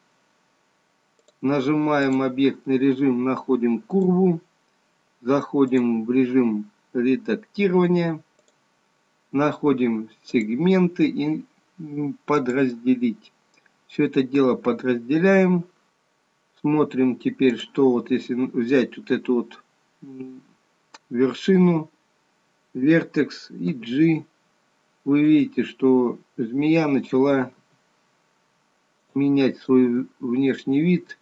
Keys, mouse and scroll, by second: 1.4 click, 10.3 click, 15.9 click, 17.5 click, 23.7 g, 27.2 click, 27.8 g, 29.6 click, 30.0 g.